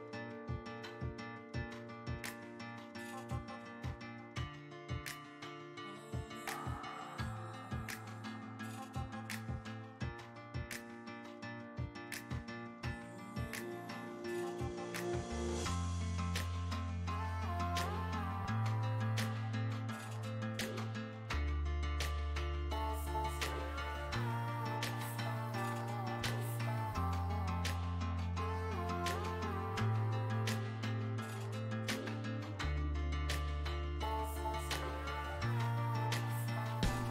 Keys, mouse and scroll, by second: 0.7-3.0 ctrl+middle drag, 3.0 click, 3.8 middle click, 4.4-8.0 drag, 8.0 middle click, 8.8-13.6 drag, 13.6 middle click, 14.5 click, 14.9-16.7 middle drag, 16.7 space, 17.2 f, 17.9-21.8 drag, 21.8 middle click, 22.3 shift+click, 23.0 middle click, 23.6-25.1 shift+drag, 25.1-26.8 middle drag, 26.8-28.6 shift+drag, 28.6 middle click, 29.2-32.3 shift+drag, 32.5-35.7 middle drag, 35.7-37.1 shift+drag.